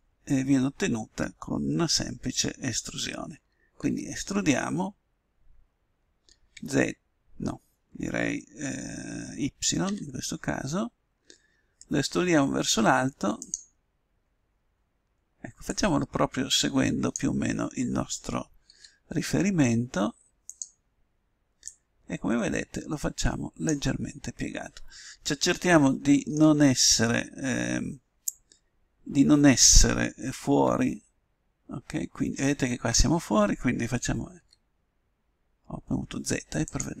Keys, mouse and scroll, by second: 3.8 e, 13.8-15.6 middle drag, 15.6-17.3 drag, 18.7 s, 21.6-23.2 drag, 24.0-27.3 middle drag, 30.5 z, 34.3 s.